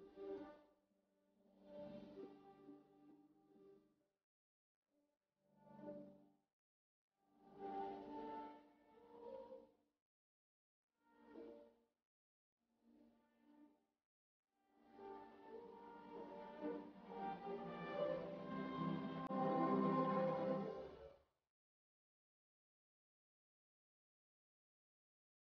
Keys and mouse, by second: 0.9 s, 3.5 Tab, 11.4 middle click, 11.9 Tab, 16.3 middle click, 16.6 Tab, 16.7 middle click, 18.9 Tab, 23.3-25.4 drag, 23.3-25.4 right drag.